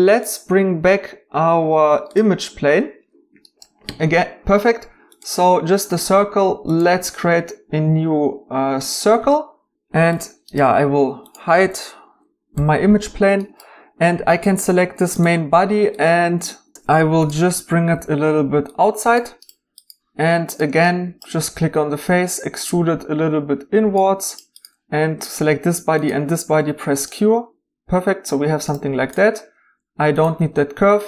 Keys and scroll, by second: 12.5 h, 16.5 w, 16.7 q, 17.9 g, 26.6 q, 30.3 x.